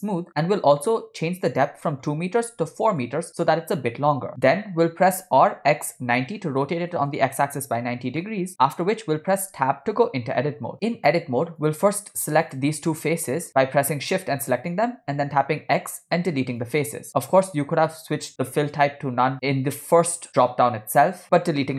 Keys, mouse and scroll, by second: 1.5-3.0 drag, 5.2 r, 8.3 middle click, 8.7 scroll up 1, 9.8 Tab, 11.8 click, 12.5 click, 13.3 middle click, 13.5 shift+click, 15.3 x.